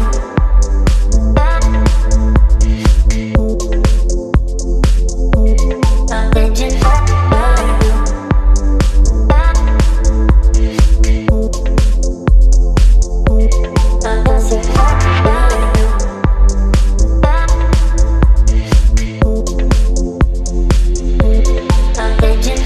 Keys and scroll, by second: 1.4 space, 3.9 ctrl+t, 8.5 Up, 10.2 Return, 12.9 space.